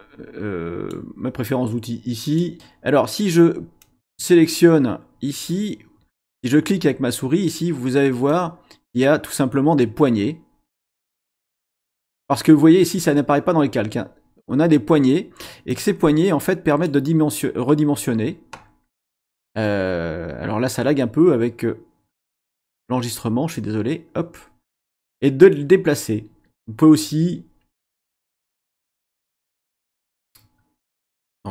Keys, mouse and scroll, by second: 2.2 click, 3.8-4.5 drag, 8.2-11.2 drag, 11.4 click, 15.7-17.0 drag, 23.5-25.2 drag, 31.0-31.5 scroll down 2.